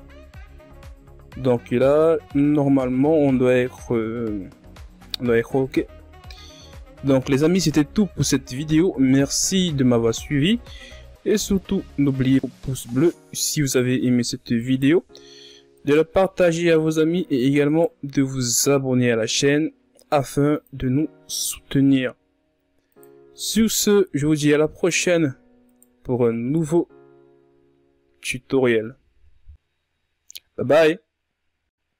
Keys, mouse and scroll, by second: 0.2-1.3 shift+scroll up 4, 1.3-4.3 ctrl+scroll up 1, 8.6-9.1 scroll up 5, 9.6-10.1 ctrl+scroll up 4, 10.1 scroll down 1, 10.7 scroll down 2, 10.8-11.6 shift+scroll up 2, 11.6-12.0 scroll up 4, 12.4 right click, 12.7 Tab, 13.0-14.0 scroll up 1, 14.0 alt+right click, 15.0-17.3 alt+shift+right drag, 17.3 ctrl+z, 18.1-21.1 alt+shift+right drag, 21.1 x, 22.0 ctrl+z, 23.3 right click, 23.8 alt+right click, 25.1-29.8 alt+shift+right drag, 29.8-31.5 scroll up 7.